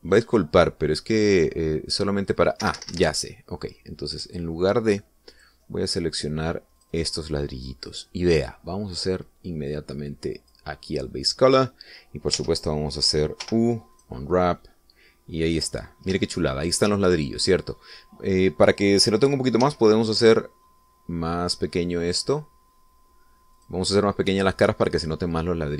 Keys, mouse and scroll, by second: 0.9-1.3 scroll down 2, 2.1-2.5 scroll down 1, 4.0 Escape, 5.6 click, 6.7 click, 7.6 scroll down 2, 8.1 click, 10.3-12.1 drag, 13.7 Tab, 14.8 u, 15.3 click, 16.6-17.0 scroll up 2, 17.6 shift+middle click, 21.0 s, 24.9 click.